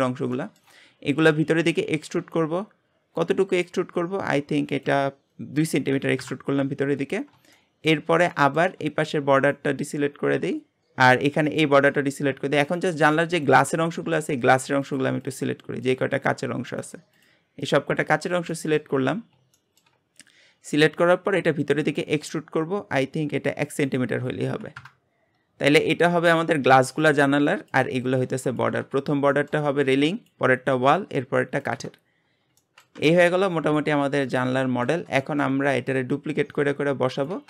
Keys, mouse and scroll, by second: 0.0-0.3 scroll up 2, 0.3 shift+middle click, 0.8-1.5 scroll up 1, 1.5 e, 4.7-7.2 drag, 7.2 scroll down 1, 7.5-9.3 shift+middle drag, 9.3 alt+shift+click, 11.5 shift+click, 11.9-12.7 shift+scroll down 2, 12.7 click, 13.3 shift+click, 13.6-14.0 scroll down 3, 14.0 shift+middle click, 14.9 shift+click, 15.2 shift+click, 15.8 shift+click, 16.2 shift+click, 16.7 shift+click, 17.2 shift+click, 18.0 shift+click, 18.5 shift+middle click, 19.0-19.5 scroll up 2, 19.5 shift+middle click, 20.0-20.5 scroll up 1, 20.5-21.3 scroll up 1, 21.3 e, 23.9-25.7 drag, 25.7-28.7 scroll down 2, 29.1 scroll up 1, 29.3 shift+middle click, 29.7-30.0 scroll up 1, 32.0-32.6 scroll down 6, 32.6 shift+middle click, 33.0 Tab, 33.2 middle click, 33.8 g, 34.7-37.4 shift+middle drag.